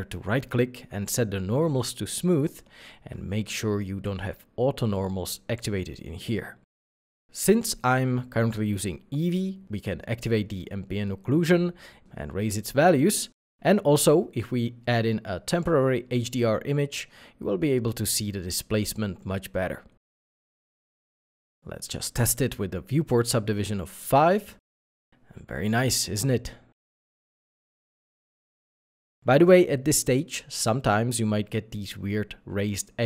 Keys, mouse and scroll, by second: 0.0 middle click, 1.2 scroll down 1, 1.6 scroll up 1, 10.4-10.8 scroll down 1, 11.0 middle click, 11.1 middle click, 14.6 2, 14.7 Return, 15.4 2, 15.5 Return, 15.5 2, 16.3-16.7 scroll up 1, 21.8 scroll down 1, 22.4 middle click, 22.5 scroll, 23.0 scroll up 1, 23.6 middle click.